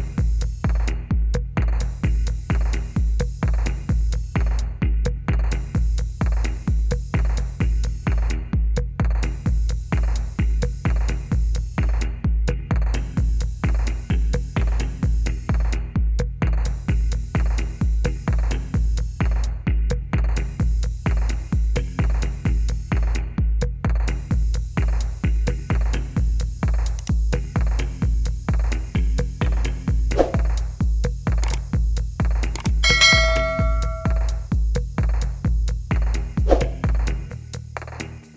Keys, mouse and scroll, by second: 1.9 click, 2.6 click, 2.8 click, 3.4 click, 3.8 click, 4.1 click, 6.2 click, 6.4 middle click, 6.5 middle click, 10.3 click, 11.8 click, 13.5 click, 14.5 Return, 16.4 click, 17.5 click, 17.8 click, 18.0 Delete, 18.3 click, 18.6 click, 19.2 click, 19.9 shift+click, 20.1 shift+click, 20.3 shift+click, 21.0 click, 21.2 click, 21.4 click, 21.7 shift+click, 22.6 click, 25.0 click, 25.6 click, 28.8 click, 29.4 click, 30.4 middle click, 30.7 middle click, 31.7 right click, 32.7 click, 34.0 click, 34.8 click, 35.8 click, 37.0 click, 38.2 click.